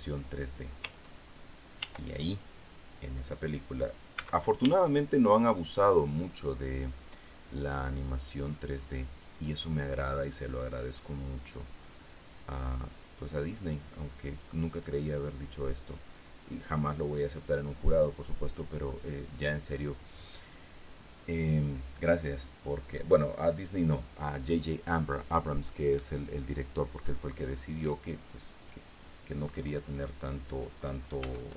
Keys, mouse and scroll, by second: 2.4 ctrl+r, 2.9 ctrl+click, 3.2 ctrl+middle click, 3.8 click, 4.7 a, 6.7 click, 7.4 middle click, 11.5-14.5 drag.